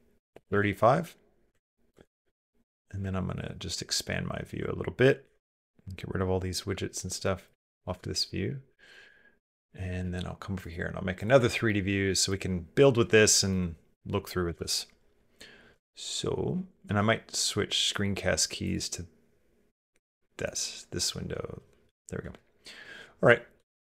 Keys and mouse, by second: 1.4 ctrl+click, 2.9-4.0 ctrl+middle drag, 5.1 t, 7.6 click, 7.9 shift+click, 8.9 shift+click, 10.4 click, 11.4 middle click, 13.3 click, 13.6 middle click, 14.3 KP_0, 15.7 shift+middle click, 15.8 shift+click, 17.8 click, 18.4 click, 21.7 n, 23.4 q.